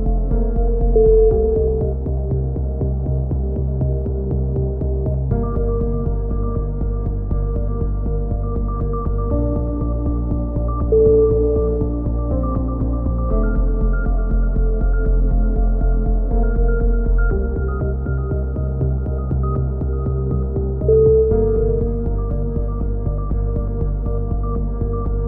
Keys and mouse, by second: 0.3 a, 0.9 z, 1.7 Tab, 2.1 a, 4.1 a, 4.5 a, 5.8 click, 6.2 middle click, 6.7 Tab, 7.1 z, 7.3-9.0 middle drag, 11.5-13.4 middle drag, 13.4-15.5 drag, 16.3-17.3 middle drag, 17.3 ctrl+r, 20.1-21.8 right drag, 21.8 click, 23.7-24.7 middle drag.